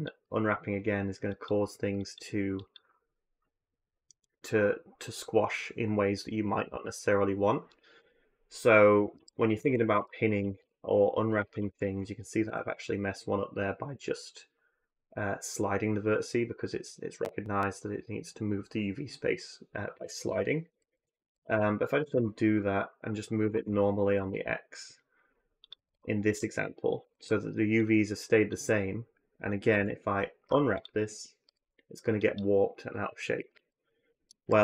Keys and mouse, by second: 8.9 ctrl+z, 9.8 ctrl+z, 10.2 ctrl+z, 10.4 ctrl+z, 20.6 ctrl+z, 20.8 ctrl+z, 21.0 ctrl+z, 21.2 ctrl+z, 21.4 ctrl+z, 21.9 ctrl+z, 23.2 g, 25.6-27.0 typing, 27.6 click, 29.5 y, 30.2 u, 31.2 a, 31.4 a, 32.0 click, 33.3 ctrl+z, 33.9 ctrl+z, 34.4 ctrl+z.